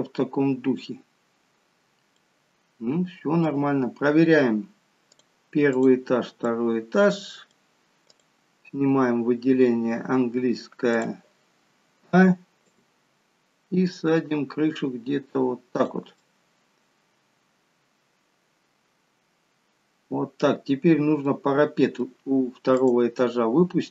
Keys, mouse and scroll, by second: 2.1-2.7 scroll down 1, 2.7 middle click, 5.1 click, 5.7 click, 6.4 middle click, 8.2 click, 11.0 click, 11.7 a, 12.6 click, 16.2 middle click, 21.3 middle click, 22.8 click, 23.6-23.9 scroll down 1.